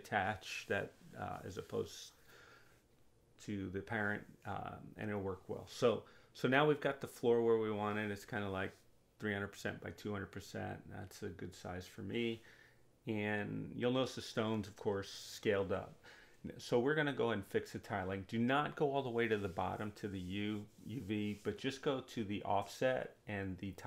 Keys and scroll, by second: 22.1 2.